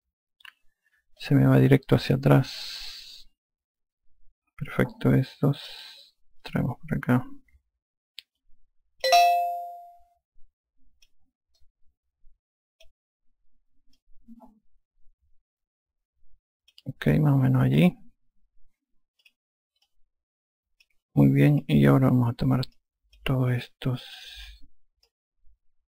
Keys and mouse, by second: 2.2 alt+click, 7.5 click, 10.4 alt+click, 12.6 click, 15.0 click, 20.3 click, 20.9 alt+click, 22.6 click, 23.8 click.